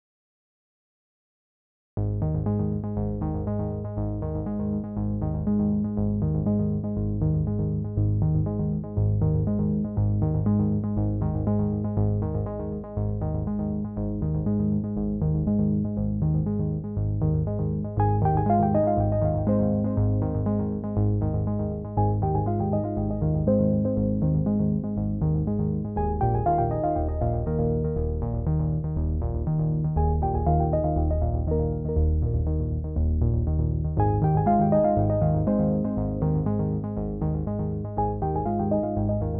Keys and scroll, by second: 3.3 ctrl+j, 9.3 ctrl+t.